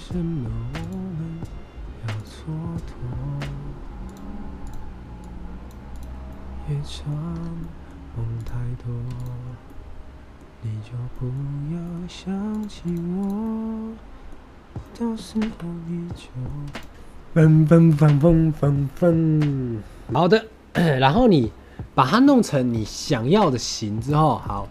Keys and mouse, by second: 0.7 click, 4.6 click, 6.2-7.0 middle drag, 7.5 middle drag, 8.3 click, 9.0 x, 9.6-10.3 drag, 9.6-10.3 middle drag, 9.6-10.3 right drag, 11.0 drag, 11.0 middle drag, 11.0 right drag, 11.7 click, 11.7 middle click, 11.7 right click, 12.5 middle click, 13.3-14.2 drag, 13.3-14.2 middle drag, 14.7 click, 14.7 middle click, 14.7 right click, 15.2 ctrl+z, 16.0-16.3 middle drag, 16.5 x, 23.9 click, 24.3 shift+middle drag.